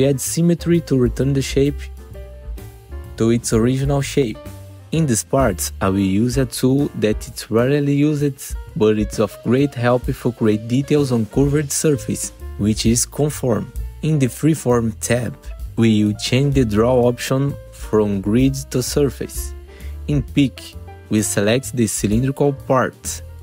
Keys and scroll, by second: 3.0 F4, 4.7 F4, 7.0 ctrl+t, 7.4 F4.